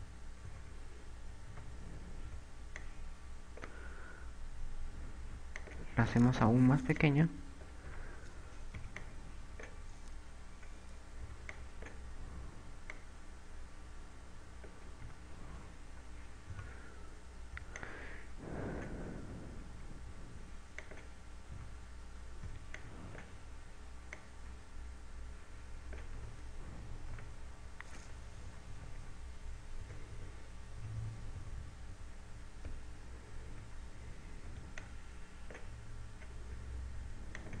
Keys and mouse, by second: 0.0-2.3 typing, 6.8 click, 7.4 click, 8.8 a, 9.9 b, 12.4 b, 14.1 click, 16.2 a, 17.2 KP_6, 18.3 b, 22.1 click, 22.4 a, 23.5 b, 25.3 click, 27.3 a, 27.5 z, 29.3 KP_8, 29.9 KP_8, 30.1 KP_8, 31.9-32.3 KP_6, 34.6 z, 35.3 b.